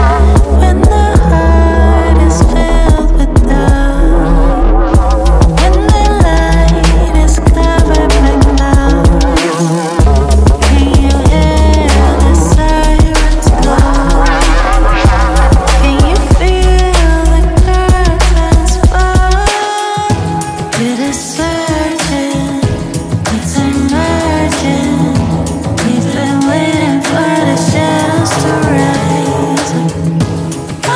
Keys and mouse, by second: 0.8 g, 1.1 z, 3.4 right click, 4.6 z, 7.0 KP_Decimal, 7.2 KP_3, 8.1 KP_Subtract, 8.8 KP_Enter, 19.1-21.0 drag, 23.0 3, 23.3 click, 24.6 i, 28.6 click, 30.3 shift+middle click.